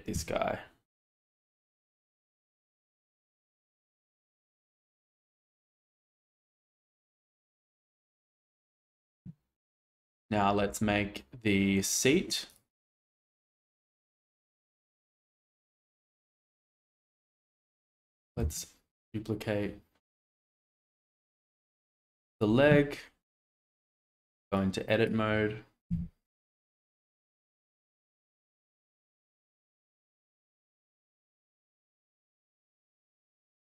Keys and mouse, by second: 0.1 x, 14.0 click, 18.4 shift+d, 23.8 Tab, 24.6 click, 25.8 g, 27.6 click, 27.7 g, 27.8 z, 29.0 click, 29.8 click, 30.8 g, 31.1 x.